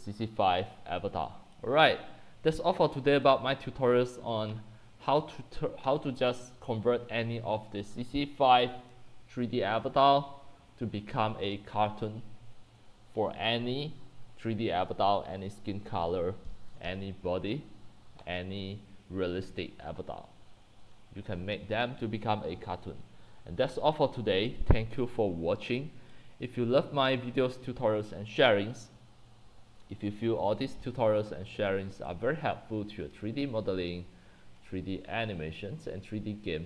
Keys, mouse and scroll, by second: 0.0-1.5 typing, 1.6 drag, 22.7-23.3 scroll down 1, 24.5 click, 25.0-28.9 drag, 30.7 click, 31.0-31.6 scroll, 36.2-36.6 drag.